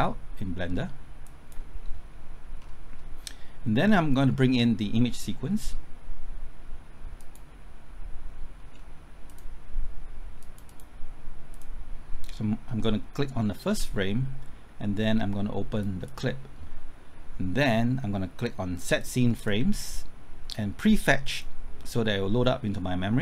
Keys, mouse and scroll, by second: 2.5-5.7 scroll up 1, 7.1 click, 8.7-9.2 scroll down 1, 9.2-20.0 drag.